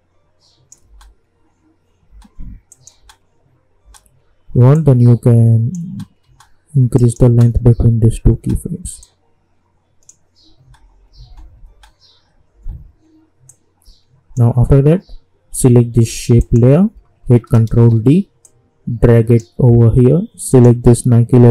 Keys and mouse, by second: 0.9 space, 2.7 click, 3.0 space, 4.7 click, 5.8 space, 6.9 click, 7.2 space, 9.0-10.6 drag, 10.6 space, 13.5-16.4 drag, 17.7 ctrl+d, 18.4-20.5 drag.